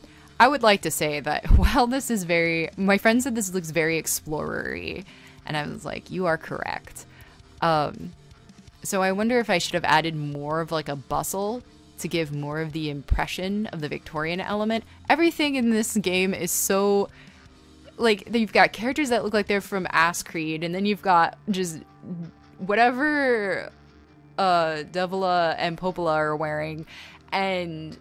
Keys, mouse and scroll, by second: 2.8 space, 4.8 scroll, 5.0 space, 5.2 space, 5.7 right click, 7.1 space, 7.9 scroll, 10.0 r, 11.3 right click, 13.2 scroll, 13.8 scroll, 16.0 scroll, 24.4 ctrl+z, 24.8 space, 25.6 b, 26.1 e, 26.4 space.